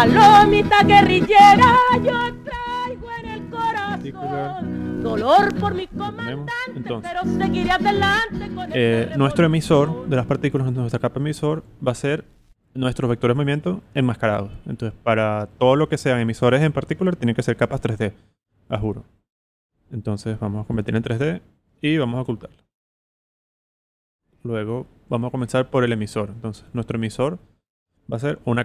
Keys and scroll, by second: 2.2-3.7 typing, 7.4 z, 8.3 alt+v, 9.0 v.